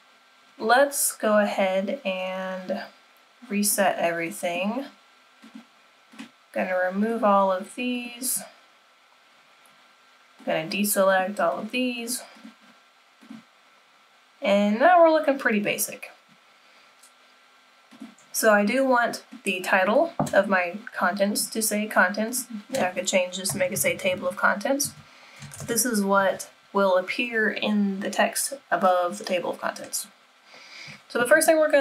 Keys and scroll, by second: 31.1 typing.